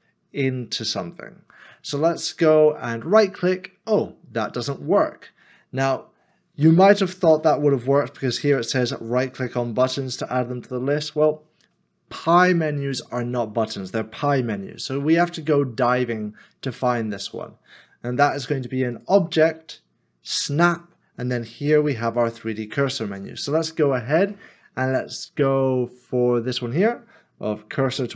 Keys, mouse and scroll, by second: 3.2 shift+s, 3.2 right click, 7.3 q.